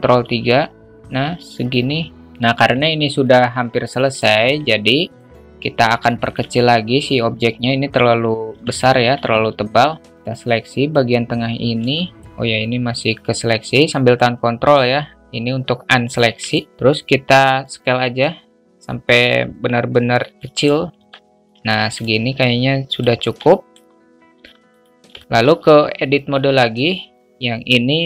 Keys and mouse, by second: 0.2 alt+z, 2.2 alt+middle click, 3.2-4.1 alt+middle drag, 6.0-6.3 alt+shift+middle drag, 8.5 Tab, 8.9 alt+z, 9.6 a, 10.0-11.0 drag, 11.9 alt+shift+middle click, 13.2-14.2 ctrl+drag, 14.8-16.1 ctrl+drag, 16.4 alt+shift+middle drag, 17.6-20.6 drag, 21.0 Tab, 21.7 alt+z, 22.0-23.0 alt+middle drag, 23.5 alt+middle click, 24.2 `, 25.1 alt+shift+middle click, 27.1 Tab.